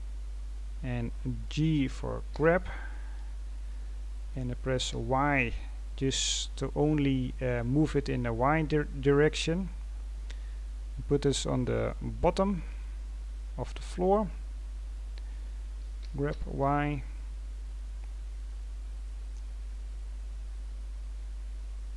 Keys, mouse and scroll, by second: 2.3 g, 12.1-12.4 scroll down 4, 12.4-14.5 scroll up 17, 14.5-15.9 scroll up 3, 15.9 g, 18.7-19.3 scroll down 11, 19.6-19.9 scroll down 9, 20.3-20.7 scroll up 1, 20.7 scroll down 3, 21.7-21.9 scroll up 1.